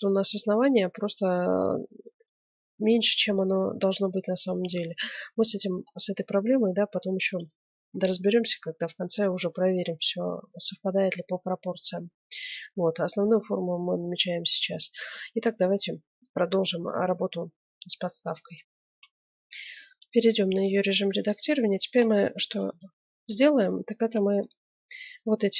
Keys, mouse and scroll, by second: 4.0-6.0 middle drag, 6.9-8.7 middle drag, 18.8 F9, 19.7-21.4 middle drag, 19.9 Tab, 21.4 click, 21.5 middle click, 22.6 KP_Decimal, 23.4-24.8 middle drag, 23.9 ctrl+Tab.